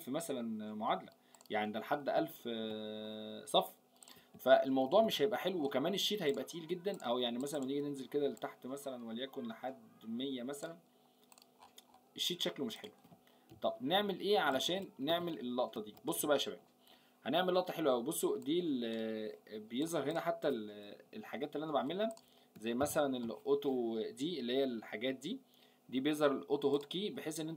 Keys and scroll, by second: 4.7 ctrl+Up, 13.5 ctrl+Up, 14.6 ctrl+shift+Down, 15.9 ctrl+Up, 22.8 ctrl+u.